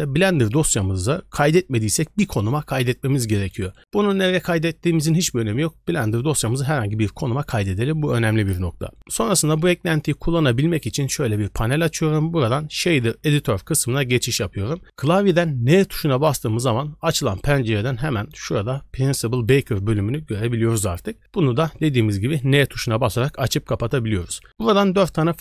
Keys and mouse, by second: 10.2 click, 10.8 middle click, 11.8-13.3 drag, 19.3 click.